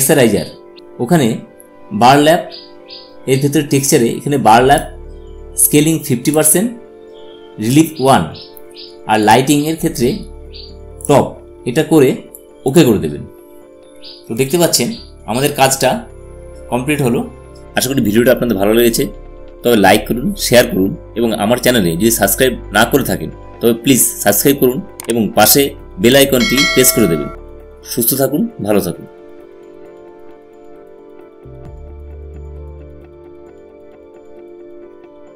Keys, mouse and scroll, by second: 3.5 click, 3.5 typing, 8.9 typing, 8.9 click.